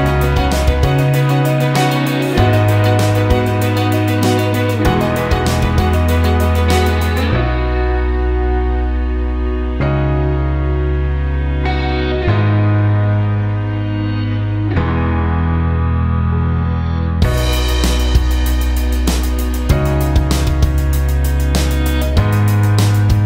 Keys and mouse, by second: 3.6 ctrl+KP_1, 5.1 click, 6.1 KP_7, 6.7 g, 12.6 ctrl+KP_1, 15.6-17.5 ctrl+middle drag, 17.5 click, 18.4 click, 19.6 typing.